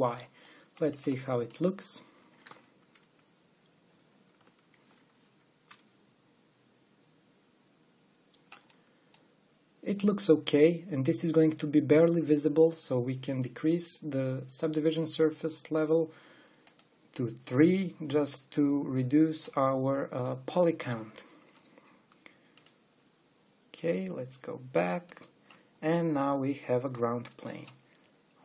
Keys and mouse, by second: 1.0 middle click, 1.7-3.2 drag, 3.3 click, 5.4-9.4 drag, 11.2 click, 11.4 click, 23.8-25.2 drag, 26.4 click, 26.6 click, 27.0 click, 27.1 click.